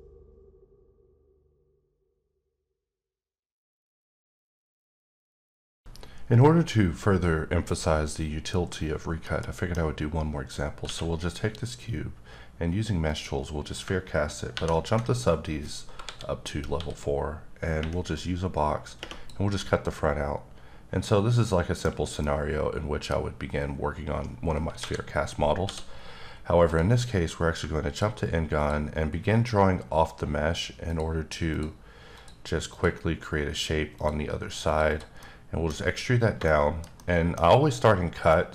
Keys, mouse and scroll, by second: 9.9-10.8 scroll up 1, 10.8 q, 13.1 click, 14.5 ctrl+4, 15.2 scroll up 2, 16.0 KP_7, 16.7 d, 18.1 click, 19.5 middle click, 22.2 middle click, 23.1 scroll up 2, 24.8 KP_7, 25.6 d, 26.7 click, 27.3 click, 28.6 click, 29.3 double click, 30.8 click, 31.5 click, 32.1 double click, 32.7 click, 33.9 click, 34.6 double click, 34.9 click, 35.2 middle click, 38.3 middle click.